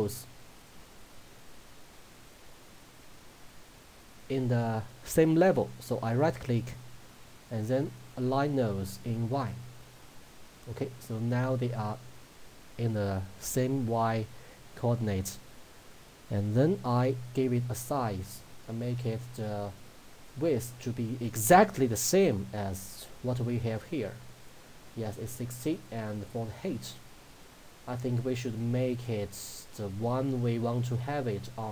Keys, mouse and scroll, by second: 6.5 right click, 9.5 click, 16.8 click, 20.7-25.8 drag, 25.8-31.7 drag.